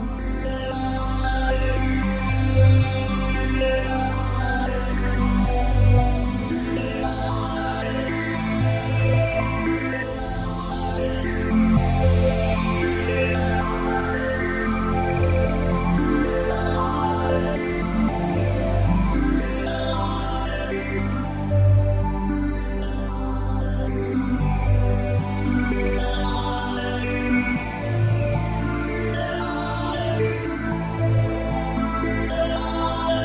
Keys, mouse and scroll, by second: 2.1 s, 9.2 click, 10.6 middle click, 12.2 n, 12.6 middle click, 15.8 click, 20.7 click, 26.4 middle click.